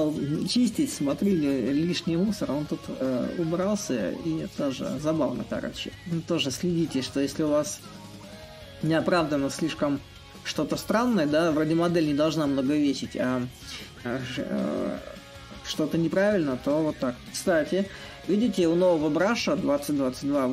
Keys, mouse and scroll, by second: 0.0-3.9 right drag, 3.9-14.2 drag, 15.5-20.5 drag.